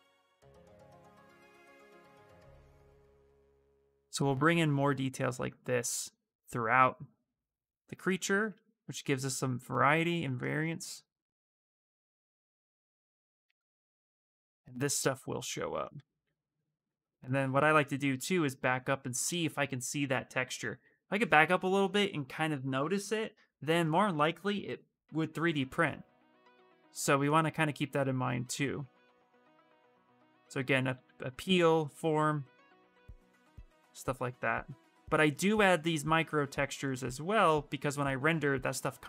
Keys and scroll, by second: 0.8 space, 30.0 s.